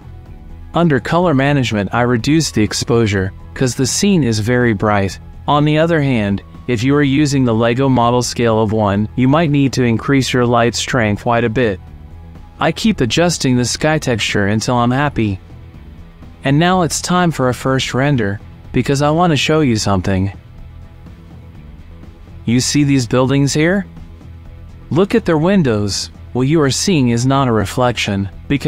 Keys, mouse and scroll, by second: 0.4 click, 1.9 click, 5.2-7.7 drag, 8.2-10.5 drag, 11.6 ctrl+s, 18.1 click, 18.2 ctrl+s.